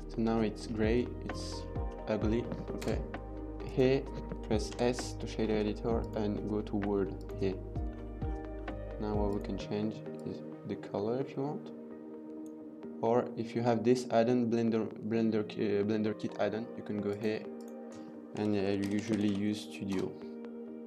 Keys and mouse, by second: 0.9 middle drag, 1.7-2.1 middle drag, 2.9 KP_0, 5.7-7.1 drag, 9.0 click, 17.0 click, 17.4-19.9 drag.